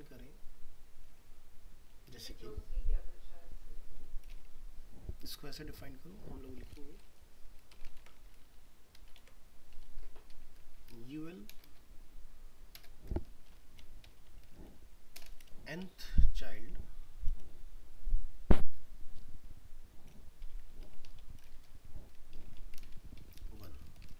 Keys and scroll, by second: 8.0 ctrl+c, 9.2 ctrl+v.